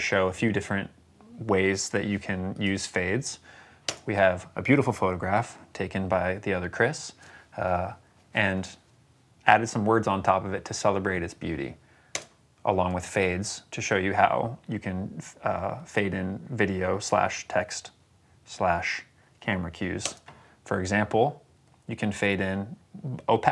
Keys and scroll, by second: 3.7 space, 12.0 space, 19.9 space.